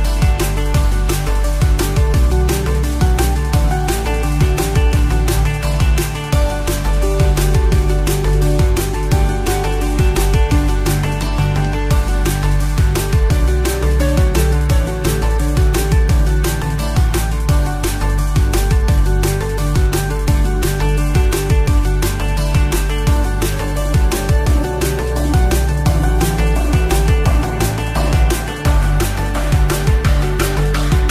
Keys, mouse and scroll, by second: 7.6-8.1 scroll up 1, 8.1 KP_7, 8.7-10.0 scroll up 3, 10.0 Tab, 10.3-11.1 scroll up 2, 11.3 click, 11.8 scroll up 2, 12.2-13.2 shift+middle drag, 14.3 shift+a, 17.2-21.1 drag, 22.5 click, 24.1-25.7 drag, 26.6-28.7 drag, 29.6-31.1 drag.